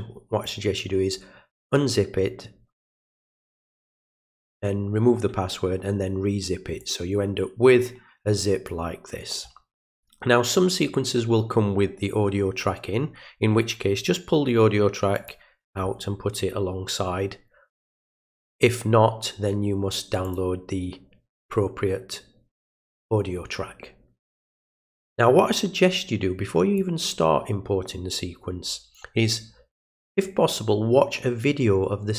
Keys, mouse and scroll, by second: 6.8-8.7 drag, 15.2 click, 20.3 click, 25.1-26.8 drag.